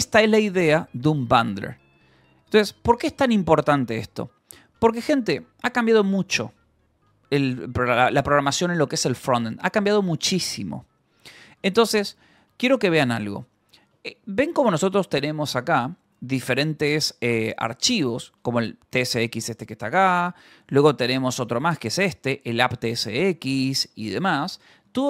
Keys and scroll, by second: 4.0 j, 7.1 Return, 7.8 j, 8.0 Return, 9.7 j, 11.3 k, 12.2 Return, 14.3-17.1 typing, 18.5 ctrl+h, 19.0 l, 19.9 Escape, 20.1-23.4 typing, 21.7 Return.